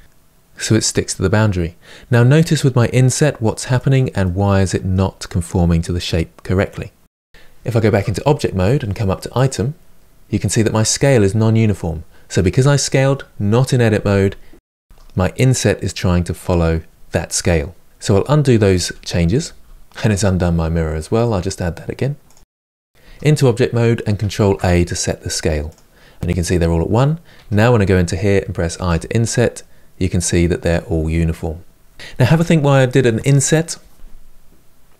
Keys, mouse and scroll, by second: 4.0-7.6 middle drag, 7.6 Tab, 17.8 ctrl+z, 19.4 ctrl+z, 22.0-22.5 drag, 22.9 Tab, 25.4 ctrl+a, 27.1 Tab, 28.6 i.